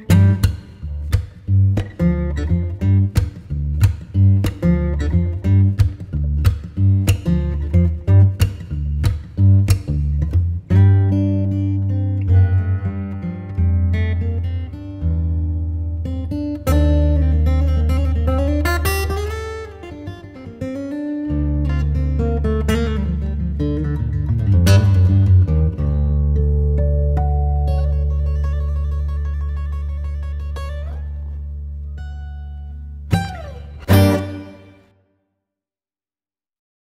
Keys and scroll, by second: 2.6 space, 8.3 ctrl+Page_Down, 10.8 F3, 11.9 F3, 13.2 F2, 15.5 Caps_Lock, 16.1-17.4 typing, 17.1 Return, 18.1 ctrl+space, 22.2 c, 22.7 Escape, 28.1 F4, 32.2 F3, 32.4 Escape, 34.2 shift+F2, 35.1 F9.